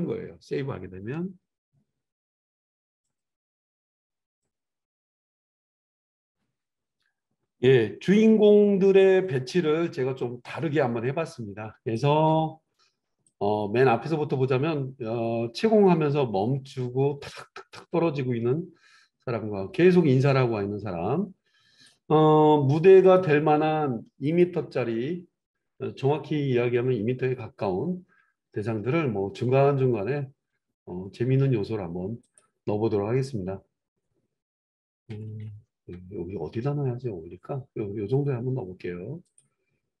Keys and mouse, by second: 9.2-21.2 drag, 21.2-23.1 right drag, 23.1-40.0 middle drag, 27.2 g, 35.8 g.